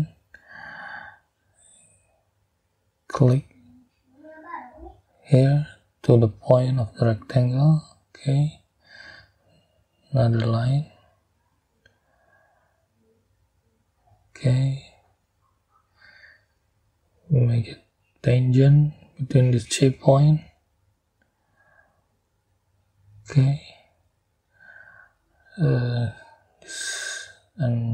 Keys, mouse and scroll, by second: 0.0 scroll up 2, 5.0 middle click, 7.1 click, 11.2 click, 13.3 click, 14.0 right click, 18.7 click, 20.0 click, 22.9 click, 24.4-24.7 scroll up 2, 25.6-27.3 drag.